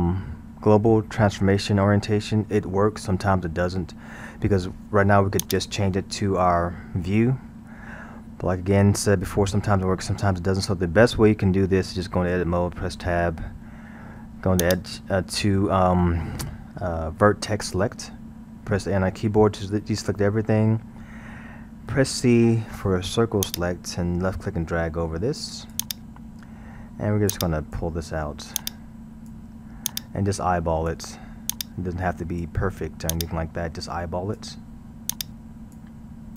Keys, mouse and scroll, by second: 5.4 click, 11.7-13.1 scroll, 13.1 Tab, 14.6 click, 19.3 a, 21.9 c, 27.3 click.